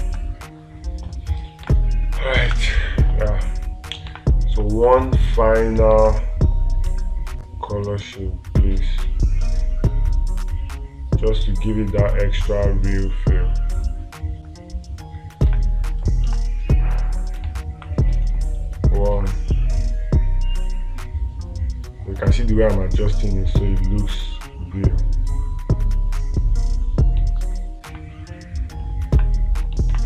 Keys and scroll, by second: 0.5 space, 2.1 space, 2.9 space, 4.6 space, 6.4 space, 17.9 space, 28.3 space.